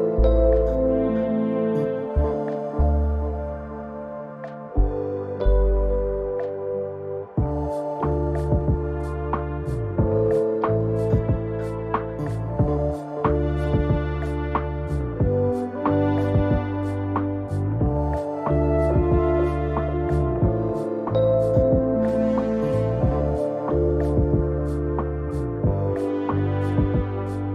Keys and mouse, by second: 0.0 ctrl+s, 0.0 click, 1.4-1.9 middle drag, 2.3 KP_0, 12.3 click, 15.5 ctrl+s, 21.8 F12.